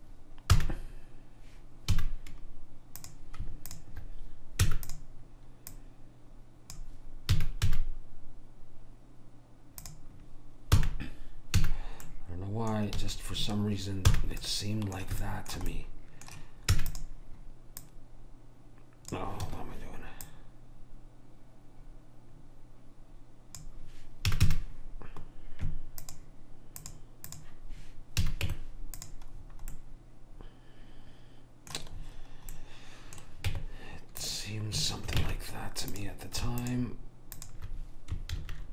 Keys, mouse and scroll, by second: 0.7 f, 2.0 a, 3.1 click, 4.7 e, 5.8 click, 7.5 s, 11.0 f, 11.7 a, 12.1-14.0 middle drag, 13.1 a, 14.2 f, 16.8 e, 17.9 click, 20.3 click, 24.4 a, 24.5 a, 27.5 click, 28.3 a, 28.6 Tab, 33.6 Tab, 35.3 ctrl+Tab, 36.7 click, 38.4 ctrl+v.